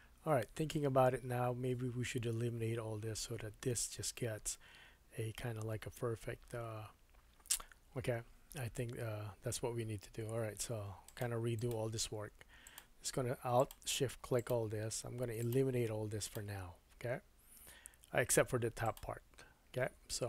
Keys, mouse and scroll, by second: 10.4 2, 11.2 alt+middle click, 11.6 alt+click, 12.6 alt+shift+click, 13.6 alt+shift+click, 14.4 alt+shift+click, 15.4 alt+shift+click, 16.2 alt+shift+click, 18.8 alt+shift+click.